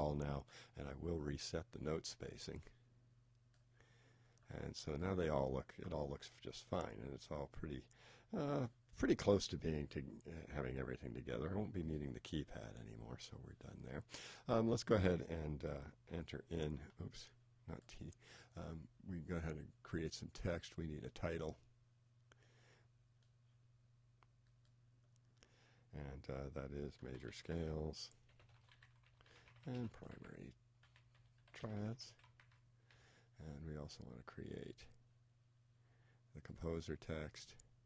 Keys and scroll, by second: 16.0 shift+t, 27.1 shift+m, 28.6 shift+s, 29.9 shift+p, 31.8 shift+t.